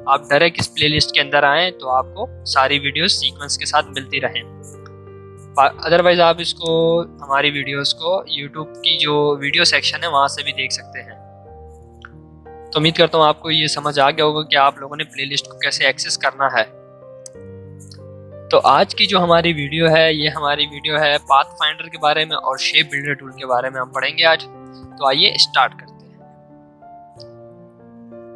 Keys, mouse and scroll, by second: 5.0 scroll up 1, 6.6 click, 7.3-7.7 scroll up 1, 12.7 scroll up 1, 12.9 scroll down 1, 15.8 scroll up 1, 17.2 click.